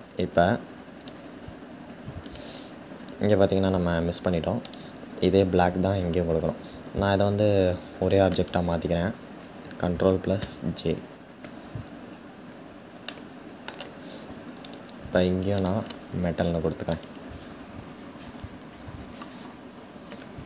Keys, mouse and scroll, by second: 0.8-2.9 drag, 2.9-4.3 scroll up 3, 4.3-8.1 scroll up 1, 8.1 shift+click, 10.0 ctrl+j, 11.6-12.7 scroll down 1, 12.7-14.3 middle drag, 14.3 click, 16.6 click.